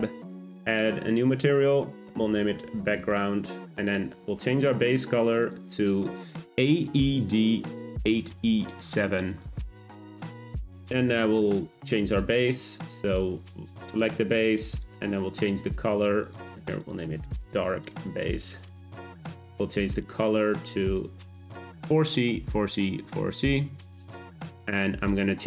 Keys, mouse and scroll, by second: 0.8-4.3 drag, 4.5 click, 12.4 click, 15.9 click, 16.2-19.8 drag, 20.0 click.